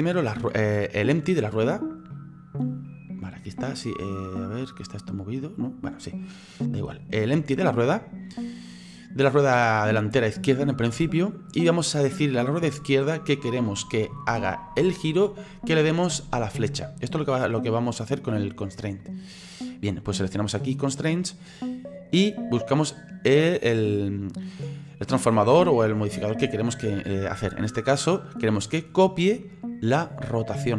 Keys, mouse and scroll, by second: 1.3 right click, 2.1-5.1 middle drag, 8.0-8.3 scroll down 1, 8.3-20.7 middle drag, 20.7 click, 22.1-30.7 drag.